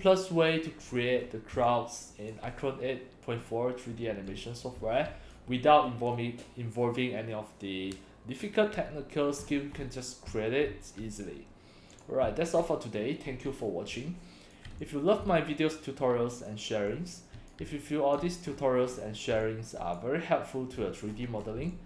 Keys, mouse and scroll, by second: 0.9-1.3 scroll down 2, 1.6 c, 1.7 click, 4.3-5.3 drag, 4.3 x, 4.8 c, 9.4-10.1 scroll up 7, 10.3 x, 10.3 click, 10.7 c, 11.9 click, 12.5 scroll down 1, 14.0 c, 14.0-14.6 drag, 14.8 x, 14.8-16.5 drag, 15.2 c, 16.9 click, 16.9 x, 17.6 x, 17.8 click, 18.5-19.0 scroll up 3, 19.4 c, 19.5 click, 21.1-21.5 scroll down 4, 21.6 x, 21.7 click.